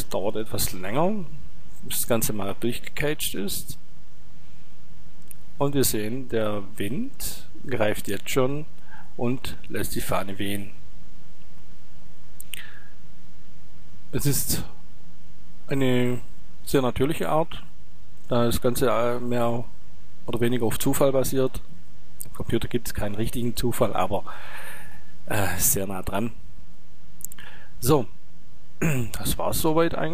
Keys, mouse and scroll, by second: 15.7 click, 23.8 click, 29.7-30.1 drag.